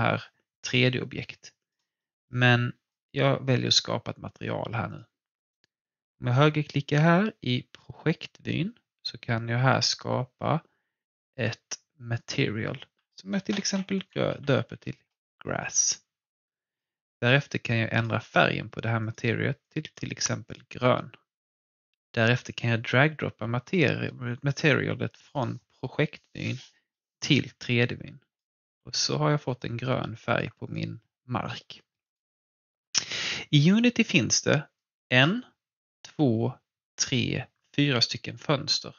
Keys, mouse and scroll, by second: 1.2 alt+Num_Lock, 1.4 alt+click, 2.0 alt+middle click, 2.9 alt+click, 5.5 right click, 12.1 click, 13.3-15.2 typing, 16.7-26.0 drag, 26.3-29.6 drag, 29.6-32.4 alt+drag, 32.6-37.6 alt+drag.